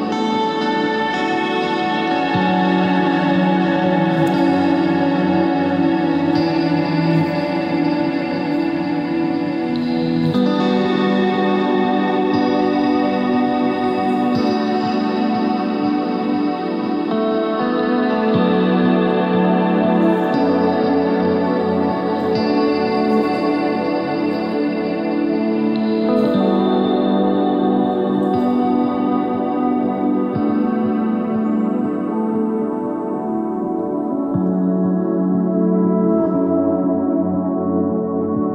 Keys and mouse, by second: 1.4 click, 2.2 click, 4.0 click, 6.2 z, 8.7 e, 9.5 z, 10.5 Tab, 11.8 Tab, 12.1 ctrl+r, 13.7 ctrl+r, 15.6 ctrl+r, 16.0 Tab, 16.9 click, 18.5 s, 20.3-24.2 drag, 25.4 click, 34.4 KP_1, 37.5 click.